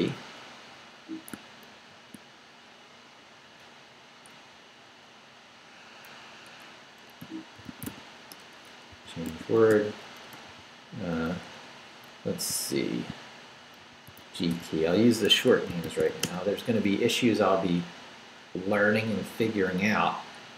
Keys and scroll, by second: 1.7 ctrl+r, 4.4 Up, 6.5 Escape, 7.0-10.5 typing, 11.5 BackSpace, 12.5 shift+BackSpace, 13.6-16.6 typing, 15.3 Escape.